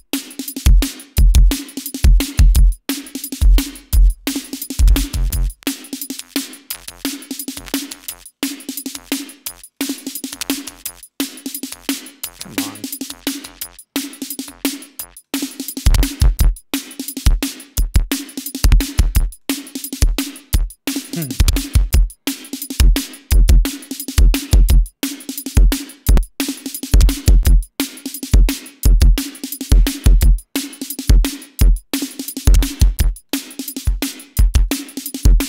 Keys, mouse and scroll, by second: 3.5 click, 4.2-5.5 drag, 6.0-8.9 drag, 9.0-10.8 drag, 11.5 click, 12.5 click, 13.0 click, 13.5 click, 14.5 click, 15.7 click, 18.1 click, 19.1 click, 19.9 click, 22.1-23.1 drag, 23.6 click, 24.9-25.8 drag, 26.2-29.8 drag, 30.8 click, 32.9-33.7 drag, 33.8-34.4 drag, 34.7-35.4 drag.